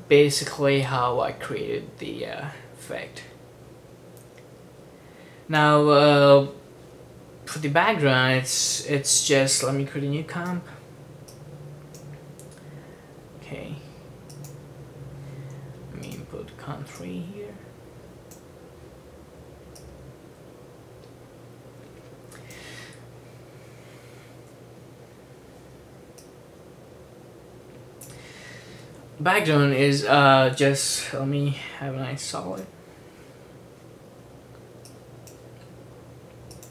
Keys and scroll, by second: 10.4 super+n, 32.4 super+y.